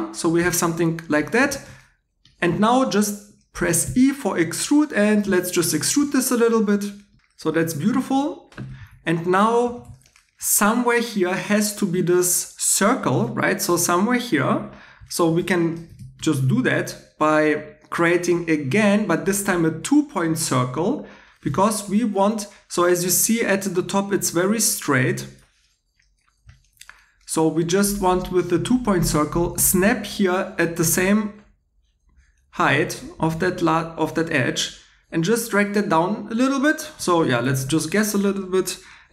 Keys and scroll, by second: 3.8 e, 7.2 2, 8.8 x, 9.7 x.